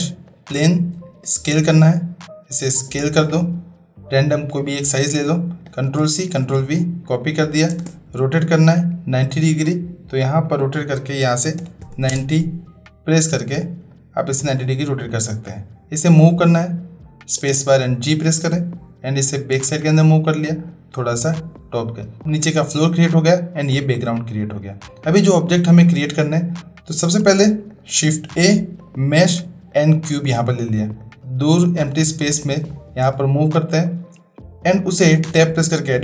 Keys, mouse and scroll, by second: 1.2 s, 5.9 ctrl+c, 6.3 ctrl+v, 7.6 space, 8.7 click, 10.4-13.0 drag, 13.9-14.4 middle drag, 14.5 click, 17.4 space, 18.5-19.9 drag, 20.7-22.0 drag, 23.1 click, 24.5 click, 25.3 middle drag, 26.2 middle click, 27.6 click, 28.1 shift+a, 31.0 click, 32.7-33.0 shift+drag, 35.2 Tab.